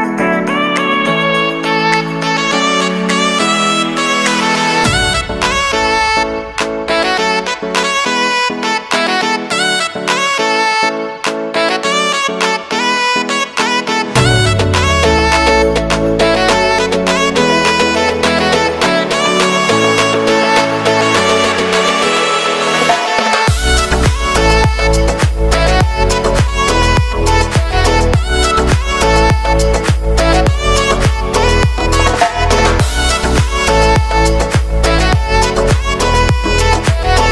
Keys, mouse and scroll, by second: 1.5-3.0 drag, 3.6-4.2 typing, 4.9 click, 7.5 click, 8.2 Return, 8.9-13.9 drag, 13.9-14.9 typing, 16.8 click, 17.8 j, 18.0 space, 19.5 click, 19.9 space, 20.7 j, 21.9 ctrl+shift+c, 22.4 Return, 23.6 alt+[, 25.2 click, 26.4-27.5 typing, 27.5 click, 28.3 ctrl+alt+y, 30.2 click, 30.5 ctrl+a, 30.9-32.4 typing, 33.6-37.3 drag.